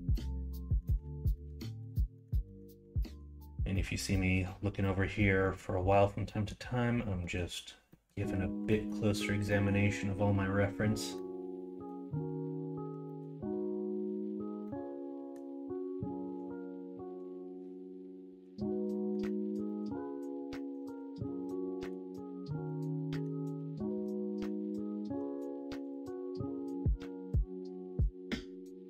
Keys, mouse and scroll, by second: 22.6 middle click, 23.7 middle click.